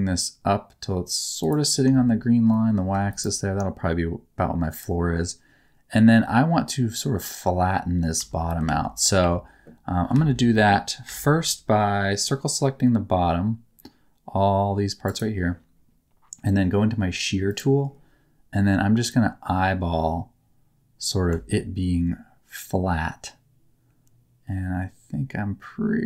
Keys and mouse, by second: 1.3 click, 2.5 shift+middle click, 3.0 click, 8.1 Tab, 8.6 alt+z, 9.1 1, 10.1 alt+a, 11.0 c, 15.0 click, 15.0 right click, 17.4 click, 19.5-21.2 drag.